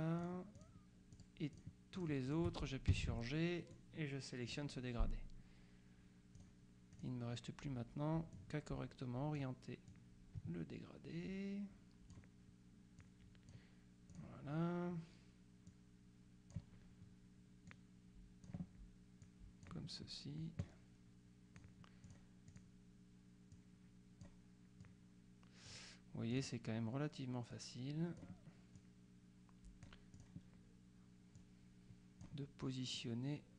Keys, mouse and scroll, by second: 3.0 g, 3.8 click, 6.4 click, 8.4-10.0 drag, 13.1 click, 14.2 click, 15.8 click, 17.8 click, 19.3 click, 20.7 click, 22.6 click, 23.6-24.8 drag, 24.9 click, 26.4 click, 27.6 click, 28.9-30.8 drag, 31.4 click, 33.0-33.5 drag.